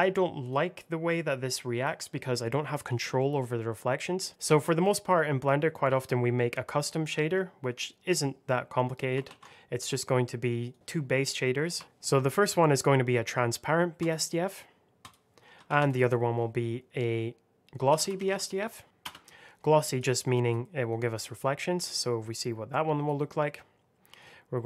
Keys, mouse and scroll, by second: 3.9-4.2 scroll down 1, 4.2 click, 4.3 middle click, 4.8 click, 7.1 middle click, 9.2 shift+a, 10.6 click, 11.7 t, 11.8 n, 13.9 click, 15.6 shift+a, 15.8 click, 17.8 g, 17.9 l, 18.1 o, 18.2 s, 18.9 Return, 19.8 click.